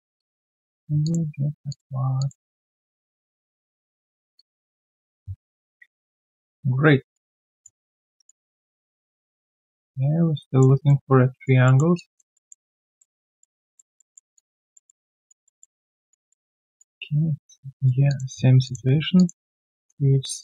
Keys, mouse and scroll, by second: 5.8 ctrl+Delete, 8.1 alt+right click, 8.4 alt+click, 9.5 alt+middle click, 9.7 alt+click, 10.7 alt+right click, 11.0 alt+click, 11.6 alt+middle click, 11.9 alt+click, 12.3 alt+middle click, 12.6 alt+right click, 12.8 alt+click, 13.2 alt+middle click, 13.5 alt+click, 13.9 alt+middle click, 14.3 alt+click, 14.7 alt+middle click, 15.0 alt+click, 15.4 alt+middle click, 15.7 alt+right click, 16.0 alt+click, 16.3 alt+middle click, 16.6 alt+click, 17.4 right click, 18.6 shift+click.